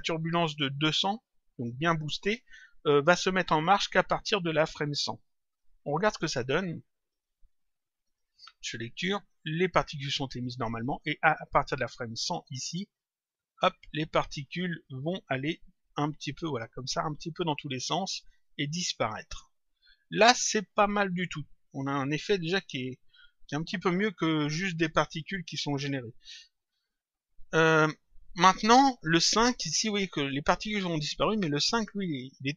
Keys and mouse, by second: 5.5 click, 7.1 click, 20.7 click, 31.7 click.